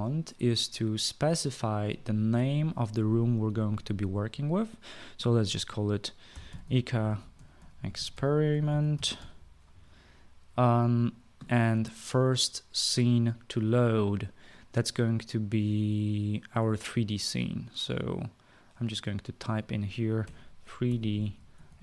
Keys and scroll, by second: 6.8-10.2 typing, 18.3-19.1 typing, 20.9-21.8 typing.